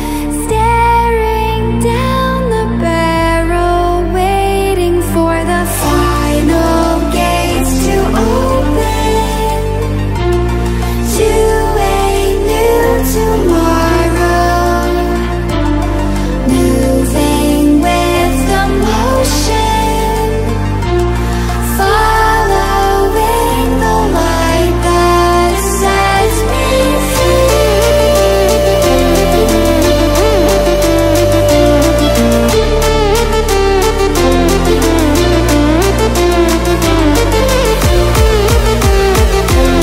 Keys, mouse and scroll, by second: 1.7 ctrl+alt+scroll up 1, 3.6-4.8 drag, 5.4 ctrl+alt+scroll down 2, 7.6 ctrl+alt+scroll up 1, 10.1 shift+click, 12.3-12.9 drag, 16.9-24.3 drag, 33.4-39.7 drag.